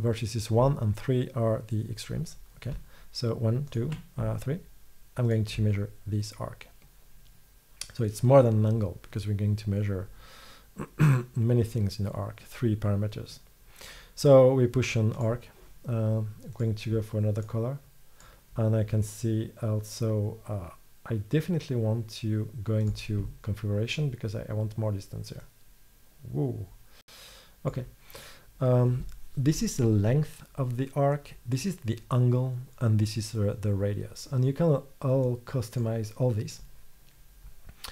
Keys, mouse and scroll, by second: 20.6-22.9 middle drag, 27.6 middle click, 34.6 middle click.